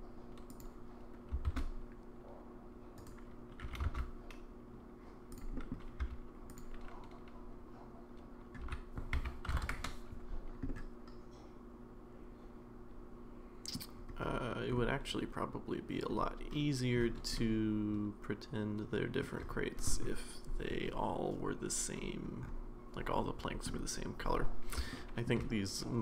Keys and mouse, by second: 1.5 shift+d, 3.6 g, 5.5 middle click, 6.0 s, 8.6 r, 10.7-13.8 middle drag, 17.4-19.2 middle drag, 24.9-25.3 shift+middle drag, 25.5-26.0 middle drag.